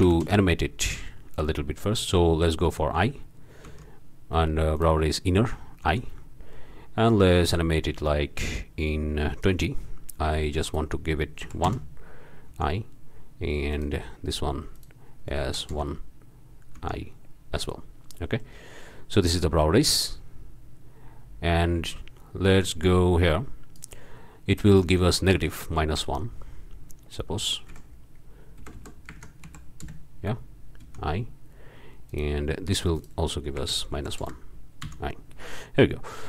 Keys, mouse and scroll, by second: 0.0 0, 0.2 Return, 3.7 i, 4.7 drag, 5.8 i, 7.4-9.9 drag, 10.6 click, 11.4 KP_1, 11.7 KP_Enter, 12.5 i, 13.7-14.1 drag, 14.7 click, 15.4 KP_1, 15.7 KP_Enter, 16.8 i, 18.2-18.7 drag, 19.3-24.3 drag, 24.8 click, 25.5 KP_Subtract, 25.9 Up, 26.2 KP_1, 27.7 Right, 28.6 BackSpace, 29.1 KP_Subtract, 29.4 KP_1, 29.8 KP_Enter, 30.8 i, 32.1 click, 32.9 click, 33.9 KP_1, 34.2 KP_Enter, 34.8 i, 35.8-36.2 drag.